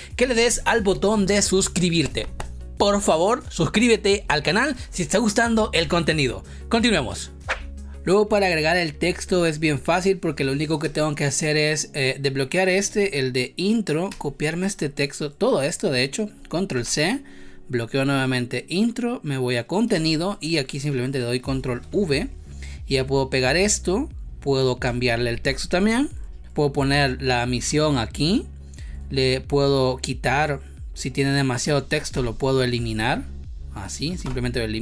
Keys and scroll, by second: 7.5 ctrl+s, 10.7 space, 16.7 ctrl+c, 19.9 space, 21.7 ctrl+v, 25.4 t, 26.2 ctrl+Return, 32.1 Delete, 34.2 BackSpace.